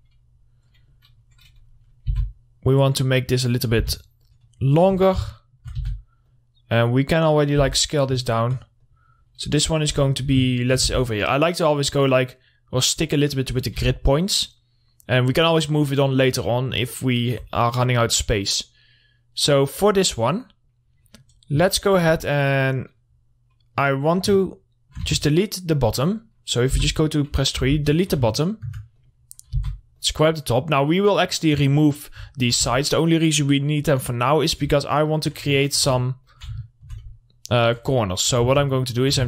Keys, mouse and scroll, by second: 2.0-2.6 scroll up 1, 2.6 r, 3.2 click, 4.2 w, 4.7 click, 5.4 z, 5.8 alt+middle click, 6.2 r, 6.7-8.1 drag, 8.1 w, 8.3 middle click, 8.5 scroll down 1, 8.7 alt+middle click, 9.3 click, 10.3 z, 10.6 scroll down 1, 11.0 alt+middle click, 11.3 r, 11.9-14.3 drag, 14.3 w, 14.9-17.3 drag, 17.3 alt+middle click, 17.9-18.7 scroll up 1, 18.7-21.5 drag, 21.5 middle click, 21.7-22.0 scroll down 1, 22.1 alt+middle click, 22.6 Tab, 24.9 alt+middle click, 25.5 alt+2, 25.7 click, 27.1 3, 27.2 click, 28.8 alt+middle click, 29.4 click, 30.0 w, 30.4-32.8 drag, 32.8 alt+middle click, 33.1 2, 34.4 click, 35.4 ctrl+click, 36.1 alt+middle click, 36.7 ctrl+click, 37.1 alt+middle click, 37.9 ctrl+click, 38.9 ctrl+z.